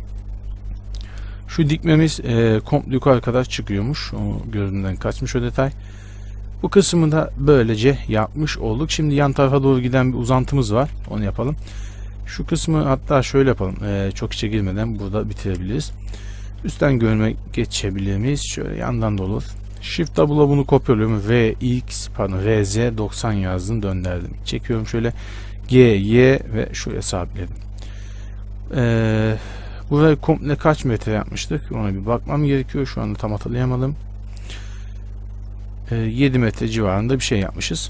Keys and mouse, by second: 1.8 z, 2.2 z, 2.9-4.7 middle drag, 4.0 z, 4.7 Tab, 10.1 Tab, 10.5 z, 11.2 z, 11.8 click, 12.6-14.2 middle drag, 15.6 z, 16.8 KP_7, 18.7 KP_3, 20.4 shift+d, 21.4 r, 24.4-29.0 drag, 25.8 g, 29.0-34.1 middle drag, 30.4 z, 34.1-35.6 right drag, 35.6-37.3 middle drag.